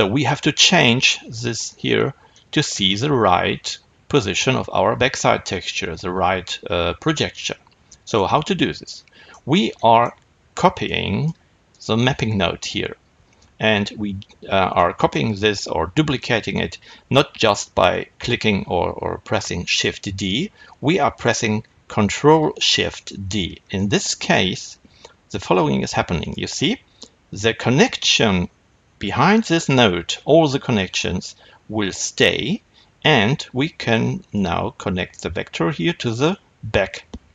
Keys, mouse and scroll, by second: 10.7 click, 23.1 ctrl+shift+d, 34.2-37.3 drag.